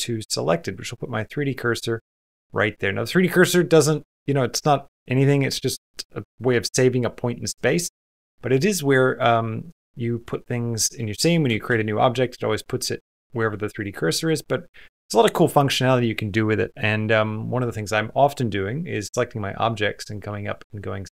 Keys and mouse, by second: 0.1 typing, 7.8 Tab, 8.6-10.3 middle drag, 11.5 shift+a, 13.3 x, 13.9 middle click, 14.6 click, 19.9-21.1 drag.